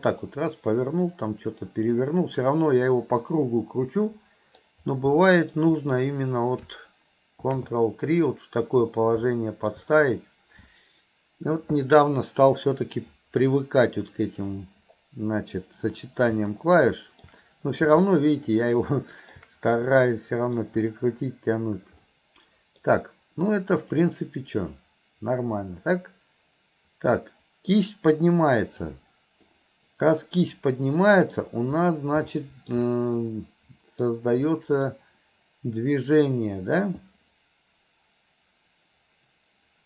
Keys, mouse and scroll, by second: 5.3-5.6 middle drag, 9.4-9.8 middle drag, 16.6-17.2 middle drag, 18.1-19.4 middle drag, 19.8-20.6 middle drag, 22.1 middle click, 24.1-28.9 drag, 29.5-31.4 middle drag, 32.4 middle drag, 33.2-34.1 middle drag, 34.6 middle click.